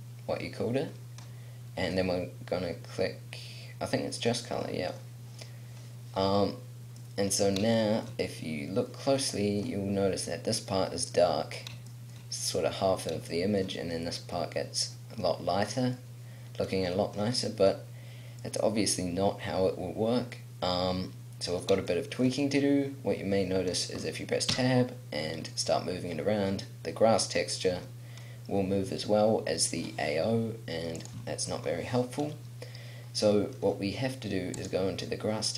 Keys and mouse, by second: 7.1 middle click, 8.3-11.4 middle drag, 13.4 middle click, 15.7-17.6 middle drag, 18.5 middle click, 19.1 middle click, 19.6 middle click, 21.0 middle click, 24.6 Tab, 27.7 r, 31.4 ctrl+z.